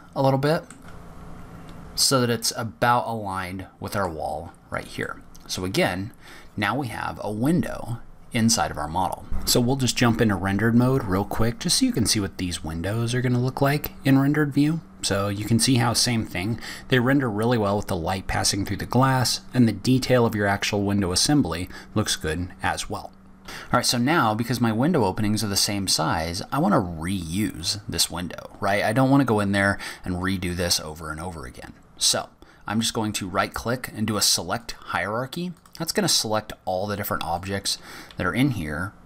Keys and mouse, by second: 1.0 click, 1.5 click, 5.6 click, 6.8-8.1 drag, 8.1-8.4 middle drag, 8.4 click, 8.6 middle drag, 9.8-10.4 middle drag, 32.5-34.5 drag, 35.4 click, 37.2 click.